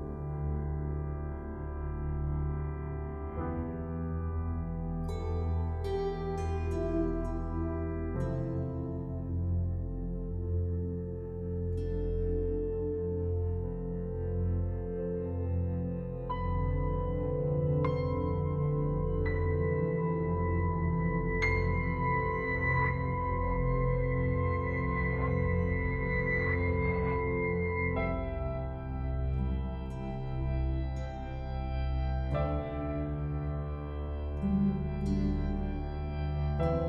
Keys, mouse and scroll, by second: 0.0 click, 0.2 ], 0.6 click, 2.5-3.7 typing, 3.8 click, 10.3 click, 20.7-21.1 scroll down 1, 23.7 click, 36.5 Return.